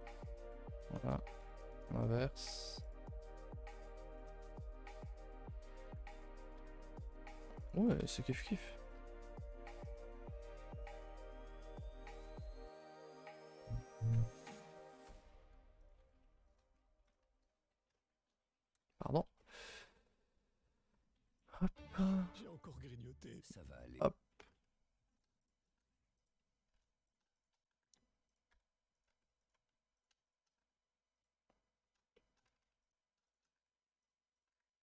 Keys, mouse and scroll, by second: 2.8-4.3 drag, 4.3 middle click, 9.9 shift+middle click, 10.1-10.7 scroll up 5, 10.4 shift+middle click, 10.7-12.8 typing, 14.1-15.5 typing, 17.2 a, 17.4 a, 17.9 middle click, 18.7 KP_0, 19.4 shift+middle click, 19.6 scroll up 1, 19.8 a, 19.9 a, 20.2 alt+click, 20.9 g, 22.6 alt+click, 24.4 a, 24.5 a, 25.1 click, 25.4 shift+click, 25.8-29.1 typing, 27.0 click, 27.3 shift+click, 29.9 click, 30.2 shift+click, 30.6 g, 32.1 shift+middle click, 32.5-34.8 typing, 32.8 click, 33.2 shift+click, 34.3 click.